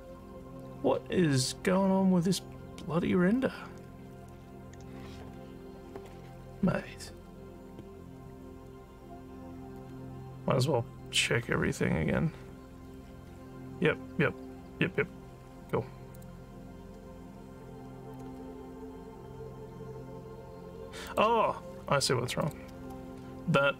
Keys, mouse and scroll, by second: 11.0 click, 16.1 click, 21.0 click, 22.4 click.